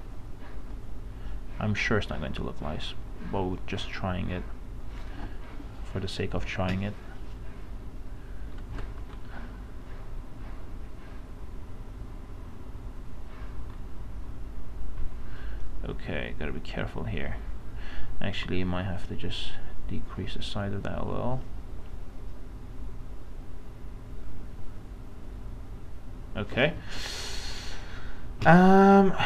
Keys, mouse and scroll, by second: 2.6 space, 5.5 click, 5.8 space, 6.0 space, 6.5 space, 9.0 ctrl+shift+z, 9.4-12.7 drag, 12.7 space, 15.8 space, 18.5 right click, 19.5 click, 19.7 space, 20.9 space, 26.7 space, 27.0 click, 27.3 space.